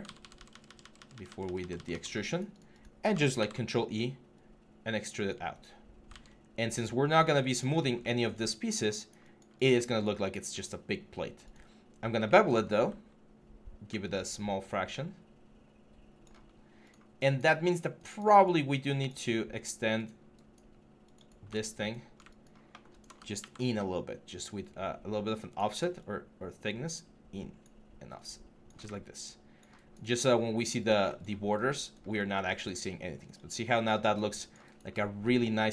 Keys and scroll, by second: 3.2 ctrl+e, 5.9 ctrl+z, 23.2 ctrl+e.